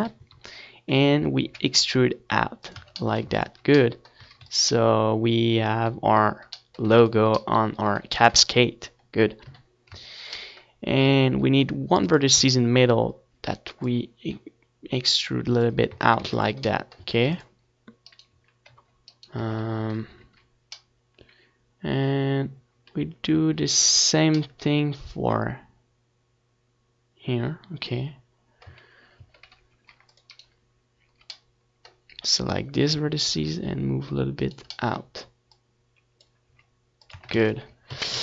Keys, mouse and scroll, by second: 0.5 Tab, 1.2 KP_1, 2.7 e, 4.0 click, 4.0 Tab, 4.6 ctrl+s, 5.4 a, 5.7 ctrl+s, 8.2 ctrl+s, 9.6 ctrl+s, 10.9 KP_1, 11.4 Tab, 12.4 a, 12.9 ctrl+r, 14.4-15.6 right drag, 15.4-17.2 drag, 17.5 Tab, 17.7 ctrl+s, 18.3 middle click, 18.5 a, 18.8 ctrl+s, 19.9-21.7 right drag, 20.0 z, 21.1 Tab, 26.2-28.0 middle drag, 30.6 z, 31.0-34.9 middle drag, 31.2 a, 31.7 ctrl+r, 32.4-34.3 right drag, 34.6 right click, 35.5 g, 37.0-38.2 right drag, 37.8-38.2 drag, 37.8-38.2 middle drag.